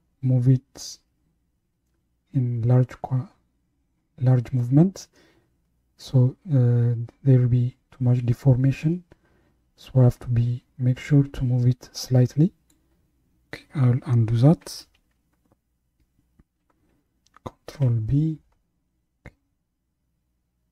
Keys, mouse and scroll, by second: 14.9 ctrl+z, 17.7 ctrl+b.